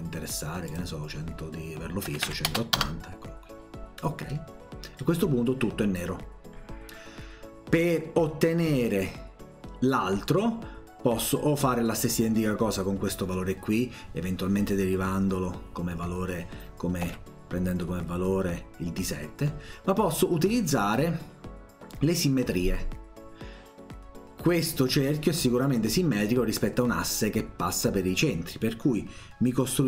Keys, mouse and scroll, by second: 0.7 click, 4.3 middle click, 17.1 Escape.